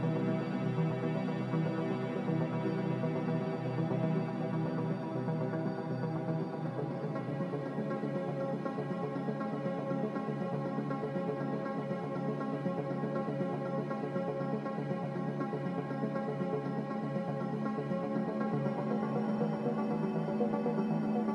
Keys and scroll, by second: 6.7 ctrl+z, 17.4-18.3 typing, 20.7 3.